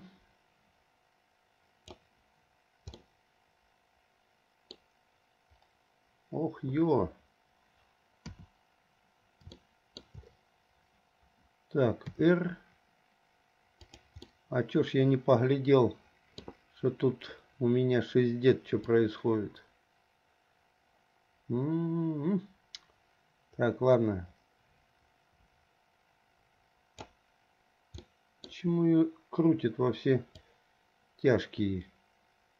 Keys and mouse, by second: 3.3-5.1 middle drag, 8.4 KP_7, 9.8 shift+middle click, 12.3 r, 14.6 middle click, 15.1 click, 15.5-16.6 middle drag, 19.2-27.4 drag, 28.3 middle click, 30.5-32.5 drag.